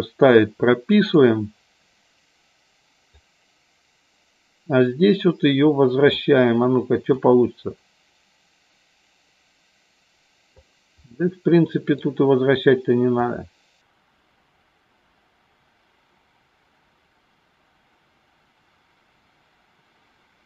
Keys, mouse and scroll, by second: 0.9 click, 3.2-6.3 drag, 7.0-10.4 drag, 11.0 middle click, 13.3-20.4 drag.